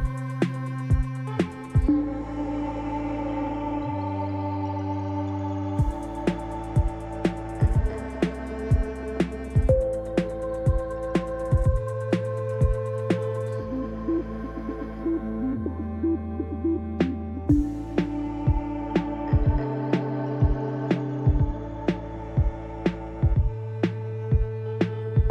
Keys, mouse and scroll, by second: 21.7-22.4 scroll down 2, 22.4-23.3 scroll up 2, 23.3-25.0 scroll down 2, 23.4 typing, 25.0-25.3 shift+scroll down 1.